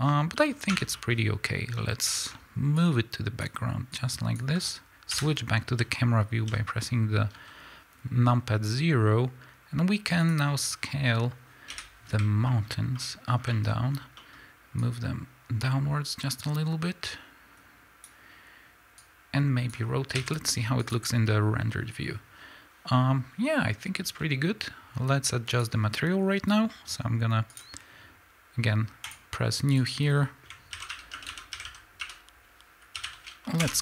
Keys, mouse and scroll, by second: 0.1-0.4 scroll down 1, 0.4-2.8 middle drag, 0.7 Tab, 2.8-10.3 drag, 5.1 KP_0, 5.8 z, 7.3 s, 11.7 KP_7, 12.5-14.8 middle drag, 12.8 scroll up 2, 13.9 scroll up 1, 14.8-25.6 drag, 20.2 z, 24.1 s, 27.5 click, 29.0-33.8 drag, 33.7 Return.